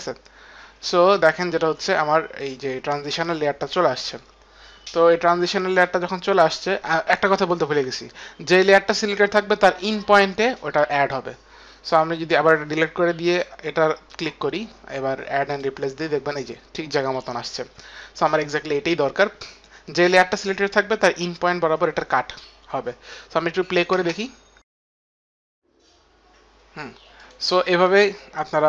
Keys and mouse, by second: 7.7 ctrl+z, 23.3 click, 24.1 space, 25.0 click, 25.0 space, 27.3 click, 28.0 click, 28.0 space.